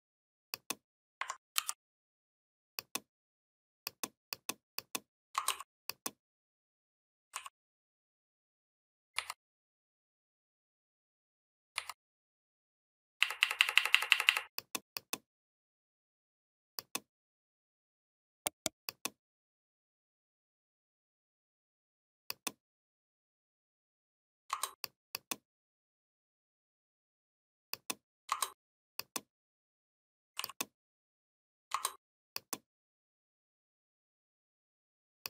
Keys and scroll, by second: 1.4 ctrl+g, 9.0 Down, 13.0 Up.